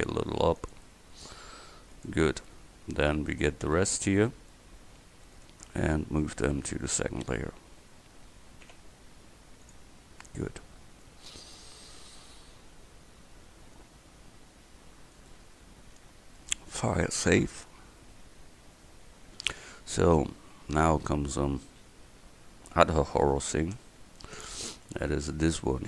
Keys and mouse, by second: 1.5 g, 6.6 m, 8.7 m, 15.2-19.0 drag.